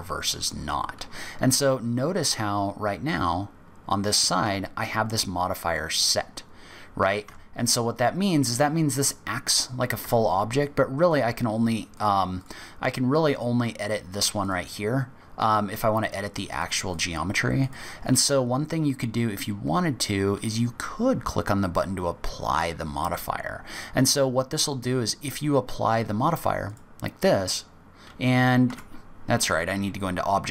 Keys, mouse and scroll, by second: 4.4 Tab, 7.2 Tab, 7.6 click, 10.0 Tab, 10.5 click, 11.1 click, 11.9 click, 12.4 click, 13.3 click, 13.7 click, 14.4 click, 15.4-16.2 scroll up 3, 15.9 click, 16.5 click, 16.9 click, 17.6 click, 18.2-18.6 scroll down 4, 26.6 click, 28.6 Tab.